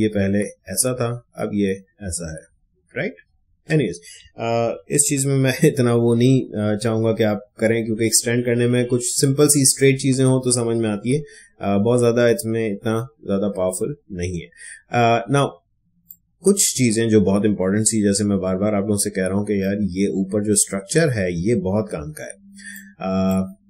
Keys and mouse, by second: 4.6 ctrl+d, 16.0-22.1 drag, 22.5 space, 22.7 click.